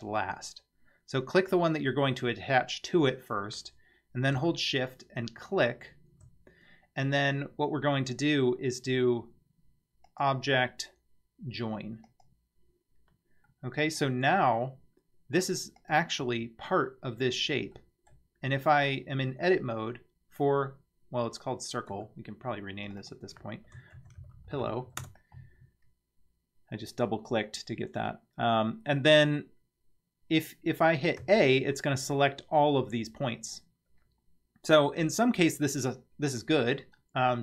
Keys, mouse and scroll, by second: 5.5 shift+click, 10.1-12.2 drag, 13.5-14.0 middle drag, 15.8 click, 16.2 Tab, 17.1 scroll up 2, 17.8 middle click, 18.8 click, 19.4 scroll down 2, 21.9 Tab, 22.9 click, 23.0-25.6 drag, 24.5 l, 31.2 a, 37.0 middle click.